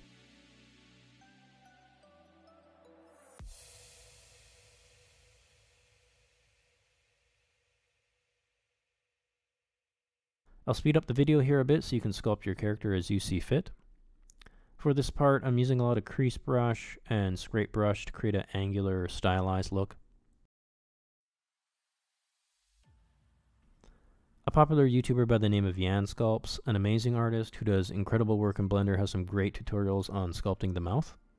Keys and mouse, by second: 0.0 click, 0.4 click, 0.7 click, 1.1 click, 1.6 click, 2.3 click, 2.7 click, 3.4 click, 4.7 click, 5.1 click, 5.5 click, 5.8 click, 6.3 click, 6.8 click, 7.9 click, 8.3 click, 8.7 click, 9.1 click, 9.5 click, 10.3 click, 11.5 ctrl+middle click, 11.8 x, 13.2 shift+c, 13.3 click, 13.4 click, 13.5 click, 13.7 click, 13.8 click, 14.0 click, 14.3 middle click, 14.6 shift+middle click, 14.8 ctrl+middle click, 15.0 click, 15.1 click, 15.4 click, 16.1 click, 16.2 click, 16.6 middle click, 16.8 click, 17.0 click, 17.3 shift+middle click, 17.4 click, 17.6 click, 17.7 click, 17.9 click, 18.1 shift+middle click, 18.5 shift+middle click, 18.7 click, 19.2 shift+middle click, 19.7 x, 19.9 ctrl+click, 21.2 middle click, 21.4 middle click, 22.2 shift+click, 22.6 f, 22.8 shift+click, 23.6 shift+c, 23.7 click, 24.1 middle click, 24.2 middle click, 24.3 shift+middle click, 24.5 x, 24.7 ctrl+click, 25.1 shift+c, 25.4 ctrl+click, 25.9 ctrl+click, 26.1 ctrl+click, 26.3 ctrl+click, 26.7 ctrl+click, 27.1 ctrl+click, 27.4 f, 27.6 c, 27.6 click, 28.2 click, 28.6 f, 28.7 click, 28.8 click, 29.1 click, 29.2 click, 29.4 click, 29.6 click, 29.7 ctrl+middle click, 30.1 ctrl+middle click, 30.3 click.